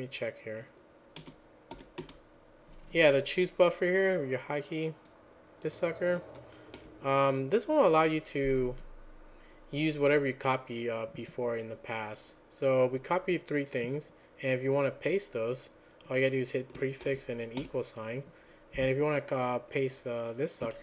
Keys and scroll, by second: 17.6 ctrl+a, 17.6 =.